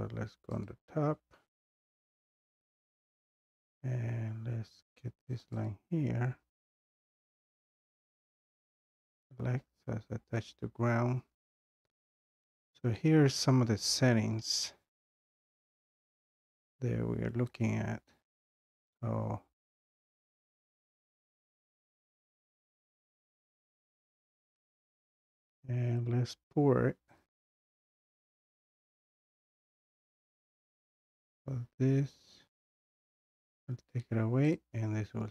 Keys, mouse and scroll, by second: 0.7 click, 1.6 scroll down 4, 2.6-3.2 scroll down 2, 3.7-4.0 scroll down 1, 4.1 scroll, 5.4 click, 5.7 click, 7.9 click, 8.1 click, 22.5 click, 23.4 scroll, 23.9-24.8 scroll down 4, 24.8 scroll up 2, 25.5 scroll, 28.9-32.2 drag, 28.9-29.4 scroll, 33.0-34.9 drag.